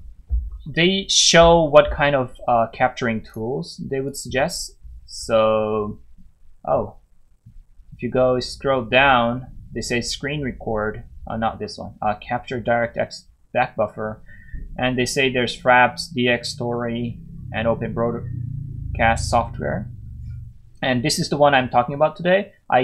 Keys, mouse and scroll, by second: 0.5 scroll down 1, 3.6 click, 7.3 scroll down 1, 11.6 scroll down 1.